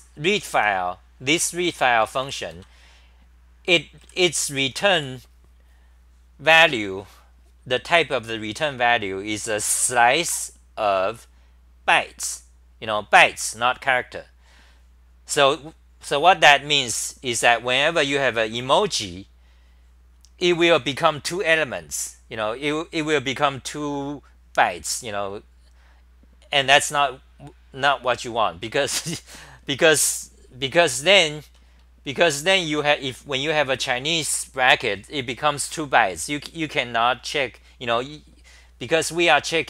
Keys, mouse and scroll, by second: 0.0-2.7 typing, 1.6 ctrl+g, 3.7-5.5 typing.